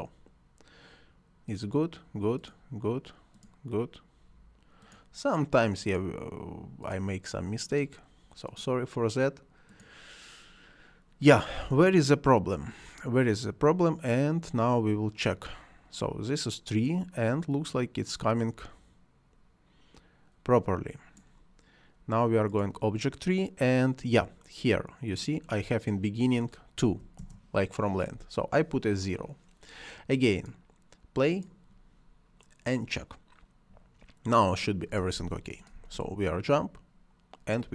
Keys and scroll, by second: 26.8 0, 27.0 Return, 35.0 space.